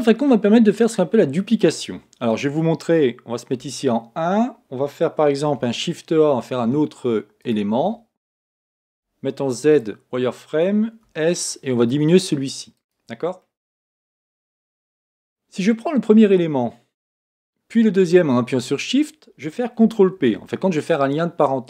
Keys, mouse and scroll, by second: 1.6-3.6 middle drag, 3.6 KP_1, 5.5 shift+a, 13.4-18.0 middle drag, 18.0-20.2 shift+drag, 20.2 ctrl+p.